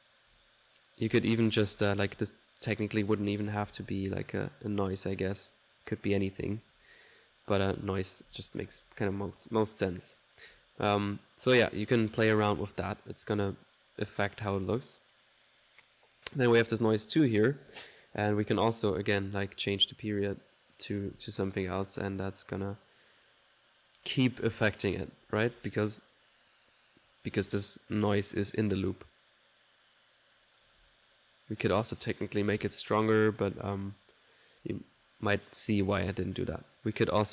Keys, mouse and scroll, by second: 0.9 typing, 2.1 typing, 3.2-4.9 typing, 4.9-6.1 middle drag, 6.7 1, 10.1 typing, 11.2-14.7 drag, 11.2 typing, 14.7 middle click, 14.7 typing, 15.4 click, 16.1 click, 16.7 click, 18.5-20.1 drag, 21.0 1, 30.1 click, 31.8 click, 36.7 click.